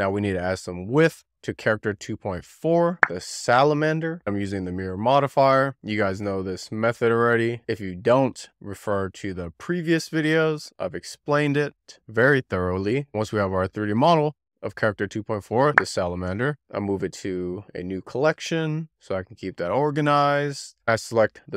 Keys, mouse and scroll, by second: 0.4 d, 0.6 scroll down 3, 0.8 middle click, 0.9 scroll up 1, 1.0 x, 1.2 middle click, 1.2 Tab, 1.5 alt+a, 1.6 click, 2.0 n, 2.2 ctrl+a, 2.6 z, 2.8 ctrl+a, 4.0 scroll up 5, 4.1 click, 5.6 click, 6.2 click, 7.8 click, 9.6 alt+z, 9.8 click, 10.3 click, 11.6 click, 12.1 click, 12.7 Tab, 16.7 m, 19.2 middle click, 19.4-19.8 scroll down 7, 19.8 alt+z, 19.9 middle drag, 20.1 alt+z, 20.2 middle drag, 20.3 alt+z, 20.8 shift+middle click, 21.0 alt+click, 21.1 scroll down 2, 21.2 shift+middle click.